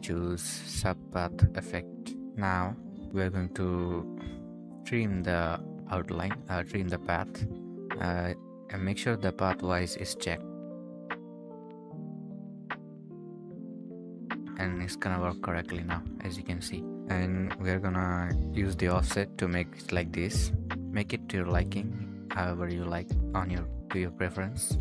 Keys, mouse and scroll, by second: 2.3-3.6 scroll down 1, 20.4-21.4 scroll up 1.